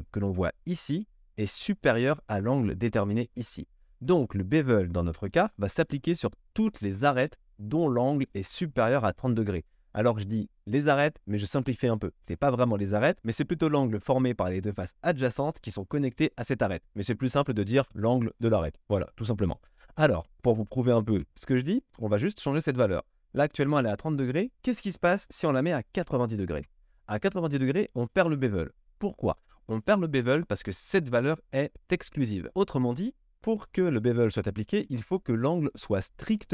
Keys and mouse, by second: 21.1 KP_1.